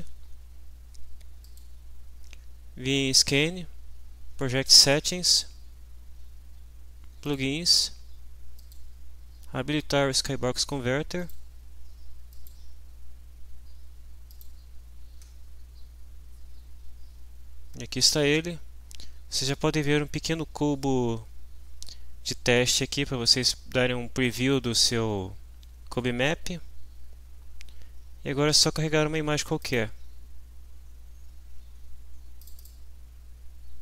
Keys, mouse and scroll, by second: 1.5 click, 5.1 click, 7.3 click, 8.6 click, 11.2 click, 12.3 click, 14.3 click, 29.6 click, 32.4 click, 33.7-33.8 scroll down 2.